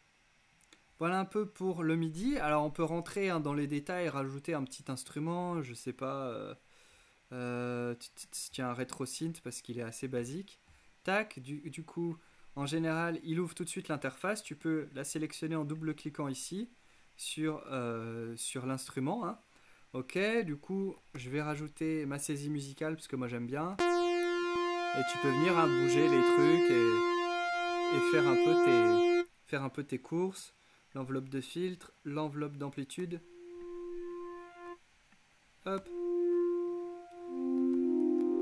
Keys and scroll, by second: 21.2 super+k, 23.8 f, 33.1 f, 35.8 f, 37.3-38.4 typing.